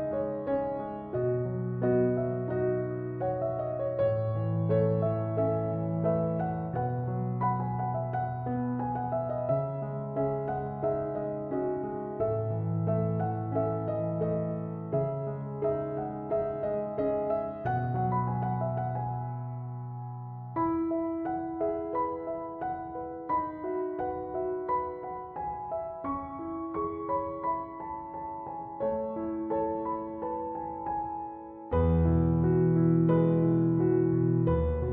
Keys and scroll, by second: 8.1 space, 9.2-10.5 typing, 11.9 BackSpace, 18.6 space.